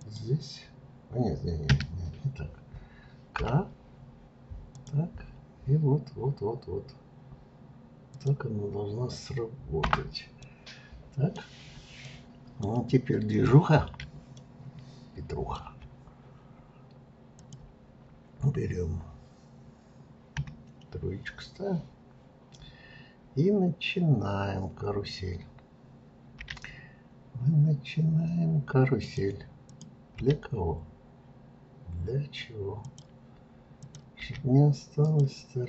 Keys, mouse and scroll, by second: 10.4-12.6 middle drag, 12.6-14.4 scroll down 1, 14.4-17.3 shift+middle drag, 17.3 click, 20.3 KP_3, 21.7-24.8 scroll down 2, 29.7 click, 30.2 g, 33.8 click, 34.2 g.